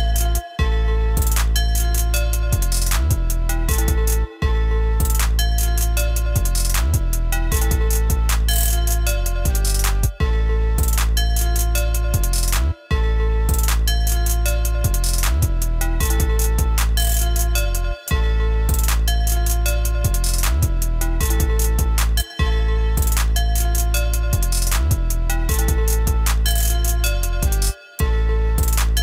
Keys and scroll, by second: 9.8 ctrl+x, 12.4 ctrl+x.